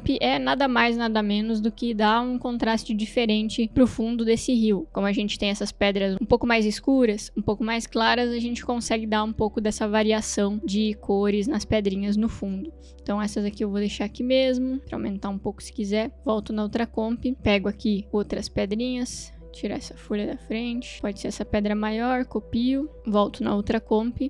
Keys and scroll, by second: 22.4 ctrl+c.